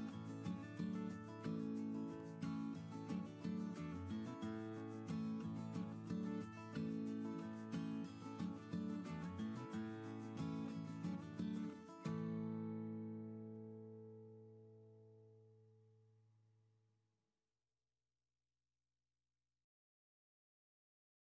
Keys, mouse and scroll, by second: 8.2 typing, 8.4 Return, 13.5 typing, 13.8 Return.